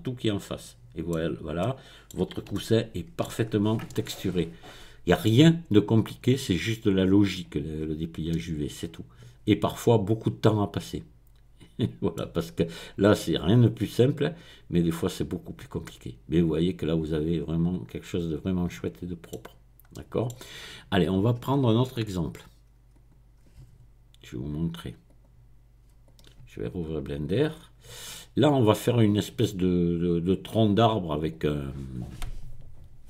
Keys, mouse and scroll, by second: 1.2-1.6 scroll down 2, 3.4-4.2 scroll up 2, 6.8 click, 7.6 middle click, 7.8-8.3 scroll up 1, 12.7 click, 13.1 middle click, 15.8-19.5 middle drag, 19.5-19.9 scroll down 1, 19.9 middle click, 22.9 click, 25.1 click, 25.5 middle click, 26.5 middle click, 27.2 click, 27.8 middle click, 31.3 click.